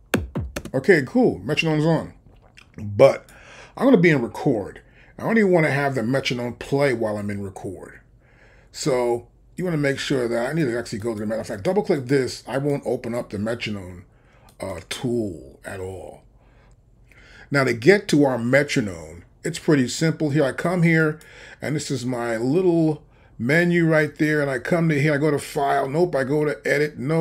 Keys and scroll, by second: 0.6 space.